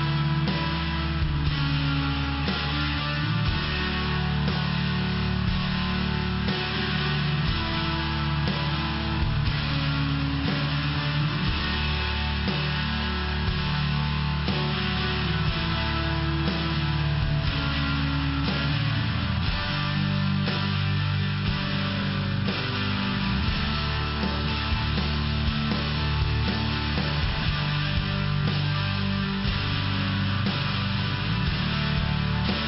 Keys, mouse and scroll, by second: 1.2 click, 7.1 click, 10.7 click, 13.9 click, 18.1 click, 18.8 click, 20.2 click, 20.9 click, 21.5 click, 22.0 click, 24.4 click, 25.0 click, 27.8 click, 28.4 click, 29.6 click, 31.4 click, 31.5 click.